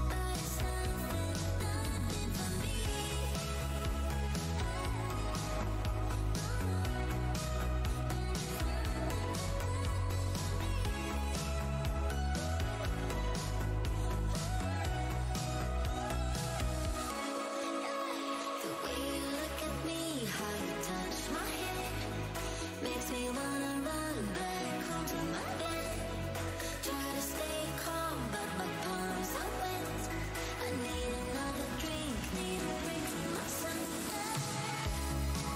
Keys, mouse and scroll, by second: 1.9 click, 3.2 Tab, 3.8 alt+click, 4.9 click, 5.9 scroll down 1, 6.1 scroll up 1, 6.8 alt+click, 7.2 click, 8.7 Tab, 9.0-9.6 alt+scroll up 1, 9.6 alt+w, 11.4 click, 11.6 Tab, 11.9 click, 12.1 Tab, 12.8 Tab, 13.1 w, 13.3 scroll up 1, 13.7 shift+x, 14.2 shift+x, 16.0 right click, 16.2 click, 16.9 shift+Tab, 18.5 Tab, 19.5 space, 19.9-20.4 scroll, 20.9-21.4 alt+scroll down 1, 21.6 click, 21.9 click, 22.2 shift+Tab, 22.9 shift+x, 23.2 Tab, 23.9 Tab, 24.2 alt+click, 24.3 alt+click, 24.7 alt+click, 24.8 alt+click, 25.1 alt+scroll up 1, 26.2 click, 27.1 Tab, 27.2 alt+scroll down 1, 28.2 shift+v, 28.7 alt+scroll down 1, 28.9 alt+click, 29.6 click, 30.1 Tab, 31.2 click, 33.0 click, 33.2 scroll down 1, 33.4 alt+shift+w, 33.9 Tab, 35.1 Tab, 35.1 scroll down 1.